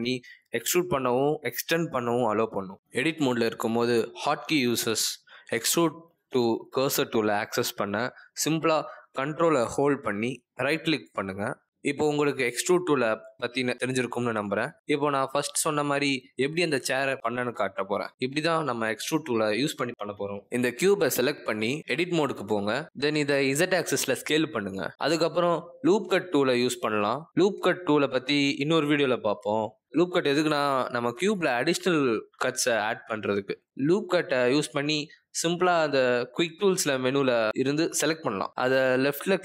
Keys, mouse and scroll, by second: 0.6 click, 1.4 click, 2.0 click, 5.4 ctrl+z, 5.6 ctrl+z, 5.9 ctrl+z, 6.1 ctrl+z, 6.4 ctrl+z, 8.2 click, 9.1 middle click, 9.7 ctrl+right click, 11.0 ctrl+right click, 22.5 click, 22.6 click, 25.2 click, 27.6 click, 36.3 click, 37.6 click.